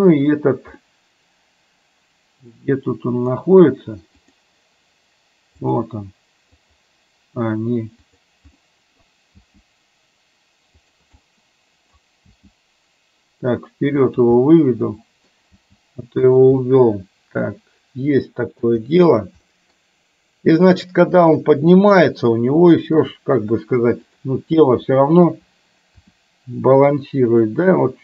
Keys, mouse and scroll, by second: 0.8-3.5 middle drag, 0.8 scroll up 1, 4.3 click, 5.7 click, 6.7 click, 8.6 middle click, 9.3 g, 11.2 middle click, 12.5 g, 14.5 middle click, 15.7 g, 16.6-18.7 middle drag, 19.6 middle click, 21.7 KP_3, 22.8 shift+middle click, 24.1 click, 26.1 r.